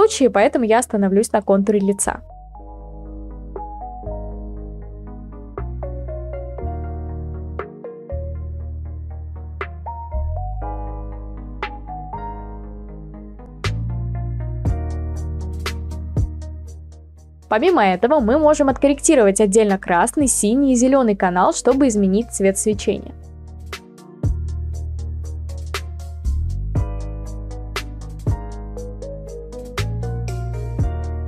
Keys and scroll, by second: 0.9-2.0 typing, 3.1 space, 3.2 space, 11.0-13.0 typing.